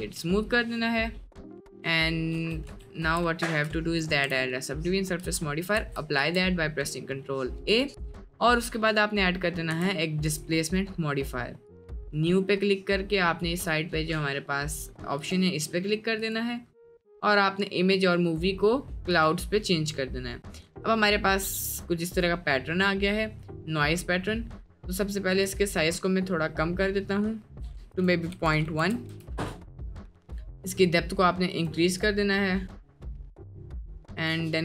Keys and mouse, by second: 0.3-0.7 middle drag, 1.2 drag, 2.3 Tab, 2.7 Tab, 3.1 Tab, 4.0 ctrl+1, 4.4 middle click, 5.8 ctrl+a, 6.2 Tab, 7.8-10.5 drag, 16.2-19.3 drag, 20.1-22.4 middle drag, 22.7 middle click, 23.4 middle click, 24.0-24.3 middle drag, 24.6 middle click, 25.5-27.7 drag, 28.0-29.1 drag, 30.3-31.8 drag, 32.1-33.4 drag, 34.1 click.